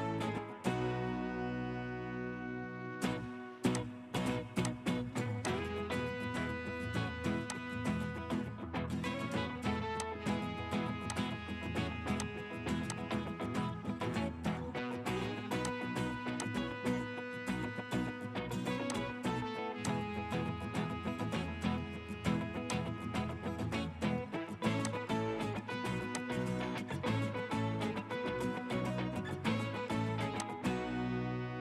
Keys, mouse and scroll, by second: 1.6 middle click, 2.3-3.8 scroll up 1, 5.8-6.2 scroll up 1, 6.2 middle click, 11.2 typing, 16.0 typing, 23.3-24.9 scroll down 1.